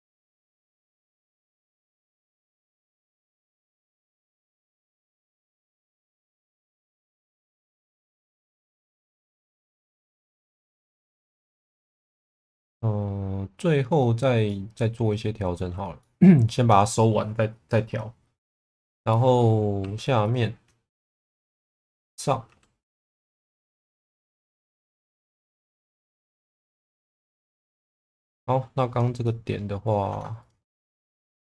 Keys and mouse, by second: 0.9-2.4 middle drag, 3.4 1, 4.5 click, 5.7 click, 6.9 shift+middle click, 7.5 2, 8.8 click, 11.4-13.7 middle drag, 14.4-15.7 middle drag, 16.0 middle click, 19.1 middle click, 19.8 2, 20.3 click, 22.4 e, 22.9 z, 25.4 g, 25.5 b, 26.1 click, 26.7 click, 27.1 1, 27.4 middle click, 28.0 shift+middle click, 29.2 middle click, 31.5 s.